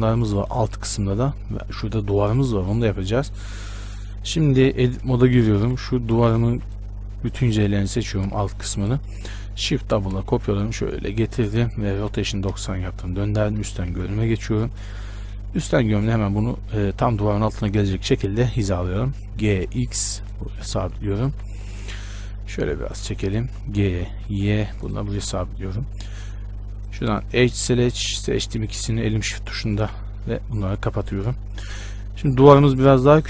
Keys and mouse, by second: 5.0 Tab, 5.8 z, 6.4 a, 6.6 b, 8.1 z, 10.1 shift+d, 11.9 r, 13.6 KP_7, 14.1 z, 18.9 g, 21.5 z, 22.7-24.7 drag, 22.7-23.7 right drag, 23.7 g, 27.0-30.0 drag, 28.5-33.2 right drag, 30.0 f.